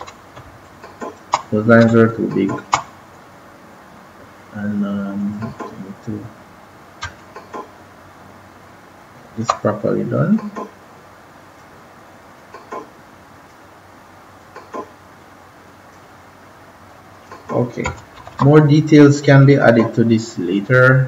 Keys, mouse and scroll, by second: 0.0-0.7 typing, 0.6 click, 2.0 click, 2.3 space, 5.1 click, 7.1 alt+click, 10.0 click, 18.1 ctrl+-, 18.2 ctrl+-, 19.3 click.